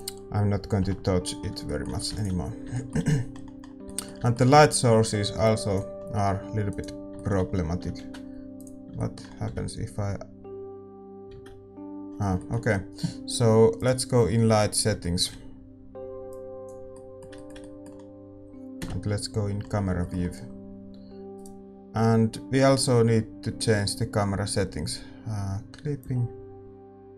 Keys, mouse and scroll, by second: 6.6-8.9 right drag, 8.9 ctrl+a, 12.3 shift+z, 14.9-21.3 drag, 21.3-26.1 right drag, 21.3 KP_0, 26.1-27.1 drag.